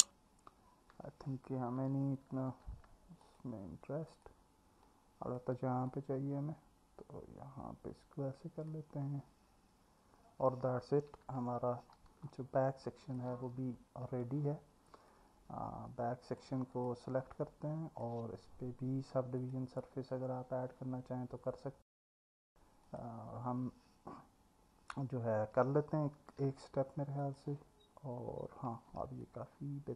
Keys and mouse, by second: 2.5 ctrl+r, 4.1 click, 5.1 click, 5.9 middle click, 11.1 Tab, 12.3-13.2 alt+middle drag, 15.1-16.4 alt+middle drag, 16.7 click, 17.5-18.0 alt+middle drag, 19.4-20.8 drag, 23.0 click, 29.2-29.9 alt+middle drag.